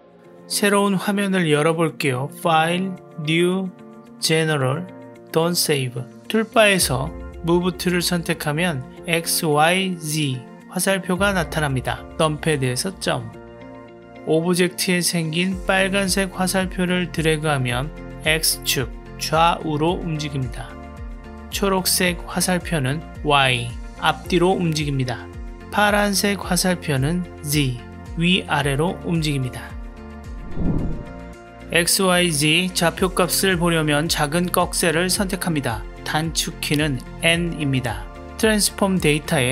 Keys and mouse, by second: 2.5-6.1 drag, 8.3 click, 12.3 KP_Decimal, 13.7-14.7 drag, 18.3-21.2 drag, 22.6-24.5 drag, 25.9-28.8 drag, 34.3 click, 37.0 n, 37.7 n.